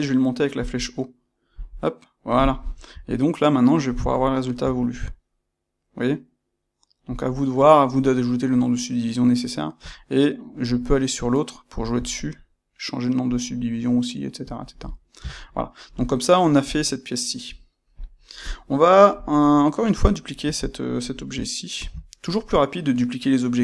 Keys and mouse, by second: 14.4 click, 14.6-18.4 middle drag, 16.6 KP_1, 18.4 click, 20.0-20.5 shift+middle drag, 20.5 click, 21.7 shift+d.